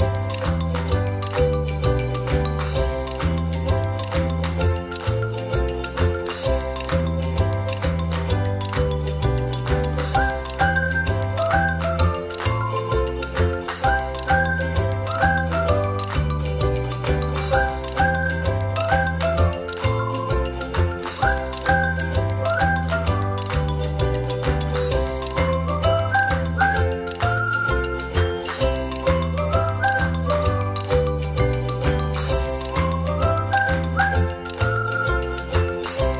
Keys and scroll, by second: 4.5 ctrl+z, 5.6 ctrl+z, 6.6 Delete, 12.5 ctrl+z, 13.1 space, 20.9 ctrl+z, 21.8 space, 23.6 ctrl+z, 26.0 space, 34.0 ctrl+z.